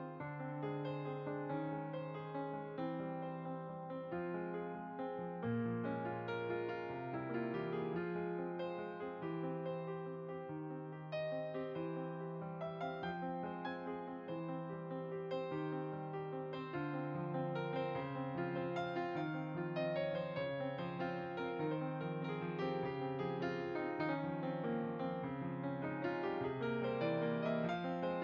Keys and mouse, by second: 1.7 middle click, 3.2 click, 4.2 click, 4.5 f, 4.7 click, 6.2 click, 6.3 middle click, 6.7 click, 7.4 shift+click, 11.2 shift+r, 12.5 click, 13.2 ctrl+r, 13.6 shift+click, 14.6 click, 17.5 g, 18.0 click, 18.7 f, 18.9 click, 18.9 click, 19.5 click, 20.4 click, 27.1 shift+click.